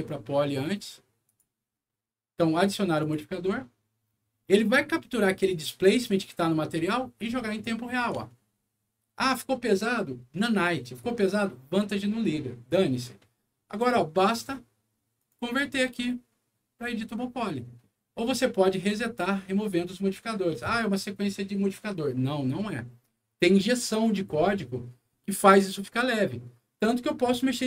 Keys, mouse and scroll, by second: 1.2 click, 2.9 click, 7.8 scroll up 1, 8.2 alt+middle click, 12.3-12.6 scroll down 2, 13.8 click, 15.1 right click, 25.4 click, 27.4 click, 27.6 click.